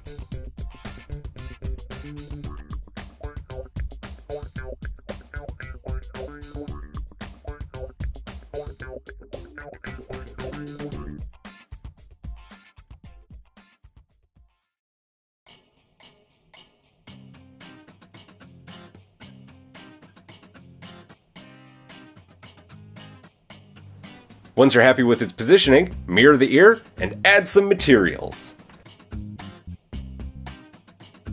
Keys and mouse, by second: 1.4-3.0 middle drag, 2.9 g, 4.7 r, 8.3 r, 10.6-15.8 middle drag, 13.9 g, 14.5 g, 15.8-19.9 drag, 18.0 g, 20.8 KP_1, 21.2 g, 23.3-24.6 drag, 24.6-25.8 middle drag, 25.8-27.1 drag, 27.1-28.0 middle drag, 28.0 drag, 28.1-29.2 middle drag, 29.2-31.3 drag, 30.6 middle drag, 30.6 right drag.